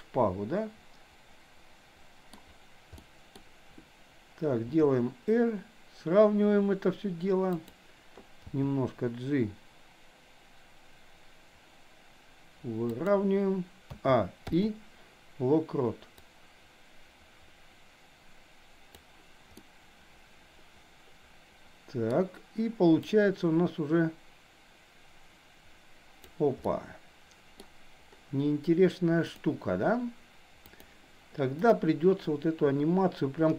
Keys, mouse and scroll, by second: 2.9 middle click, 4.7 r, 8.4 g, 13.9 a, 14.6 i, 16.2-19.1 drag, 19.6-22.2 middle drag, 23.1-26.4 drag, 26.7 middle click, 29.3 click, 30.8 click, 31.6 click.